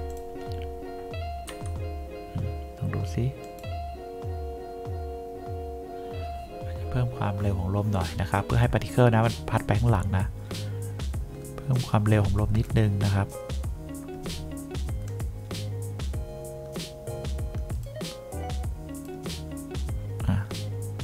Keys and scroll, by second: 1.6 F1.